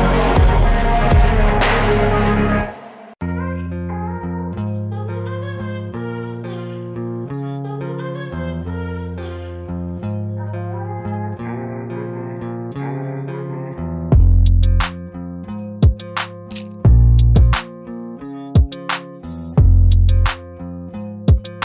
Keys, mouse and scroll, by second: 0.8-2.3 middle drag, 3.5-4.6 scroll up 5, 4.6-5.3 scroll down 8, 5.4 middle click, 5.8-7.2 scroll up 3, 7.2-9.0 scroll up 1, 9.0 click, 9.5-11.3 scroll up 4, 11.3-12.5 scroll down 7, 12.5 middle click, 12.9-14.4 scroll down 1, 14.8-15.8 drag, 15.8 KP_1.